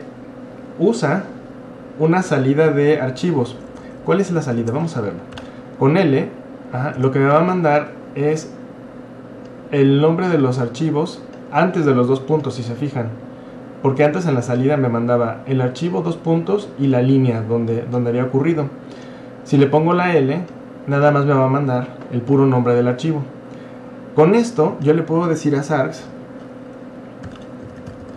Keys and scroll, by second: 3.4-5.4 typing, 7.0 Return, 7.9 typing, 26.0 Up, 27.0-28.1 typing.